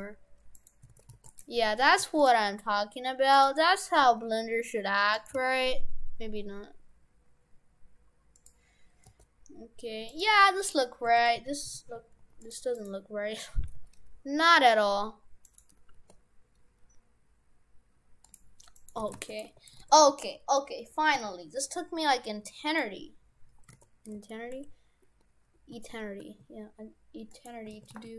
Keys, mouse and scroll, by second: 0.6 right click, 1.0 shift+f, 1.4 Tab, 1.9 shift+f, 2.4 Tab, 3.4 right click, 4.0 g, 5.4 g, 8.4 g, 10.7 right click, 11.2 shift+f, 12.8 right click, 13.4 a, 13.6 g, 16.0 g, 18.8 right click, 19.0 shift+f, 19.5 Tab, 19.8 shift+f, 23.8 shift+f, 27.8 shift+f.